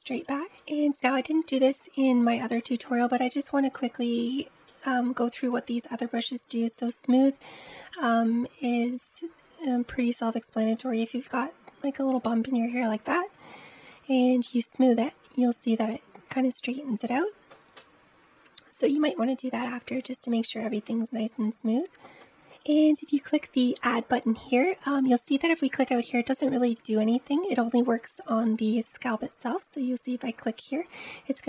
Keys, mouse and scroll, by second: 0.4-1.1 scroll up 5, 1.1-1.6 scroll up 2, 1.6-2.6 shift+middle drag, 2.6-3.5 scroll up 2, 3.5-4.0 scroll up 1, 4.0-6.6 shift+middle drag, 6.6-13.7 drag, 13.7 f, 14.8-17.6 drag, 18.9-21.9 drag, 22.3-30.8 drag, 30.8-31.4 middle drag.